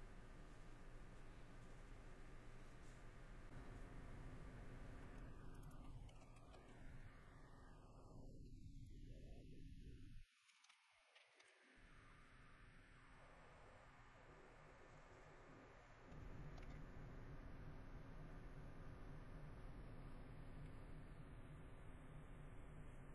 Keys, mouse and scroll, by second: 0.4 middle click, 1.5 middle click, 2.8 middle click, 5.0 shift+middle click, 5.5-5.8 scroll, 5.8 shift+middle click, 6.7 middle click, 7.5 middle click, 8.7 middle click, 14.9 middle click, 16.2 middle click, 17.1 middle click, 18.8 middle click, 19.9 middle click, 21.5 middle click, 22.9 middle click.